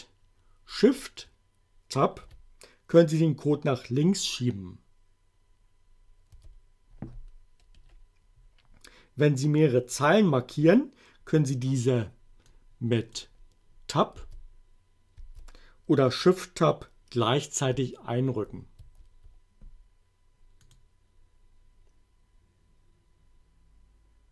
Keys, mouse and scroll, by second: 2.0 shift+Tab, 6.3 Tab, 7.7 BackSpace, 12.5 click, 14.2 Tab, 15.2 Tab, 18.3 shift+Tab, 20.6 click.